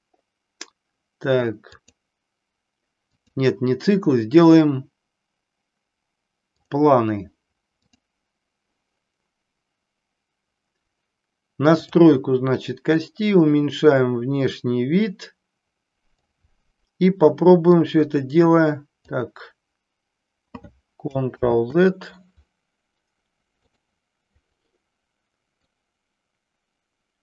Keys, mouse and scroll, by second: 3.2-6.8 drag, 8.0 click, 12.9 click, 18.0 click, 21.4 ctrl+z, 23.6 click, 25.9 click.